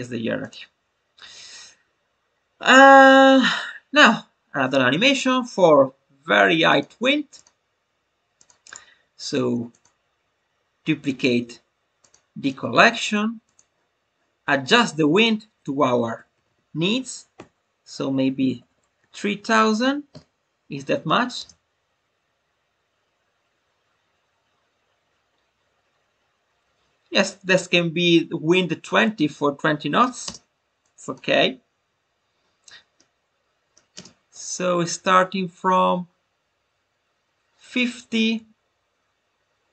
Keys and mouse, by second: 0.3 click, 6.6 click, 7.3 click, 8.3 click, 8.6 right click, 11.0 click, 11.9 click, 13.4 click, 15.1-20.7 drag, 18.3 BackSpace, 19.4 0, 21.8 space, 30.2 space, 30.8 click, 32.9-33.9 middle drag, 33.9 space.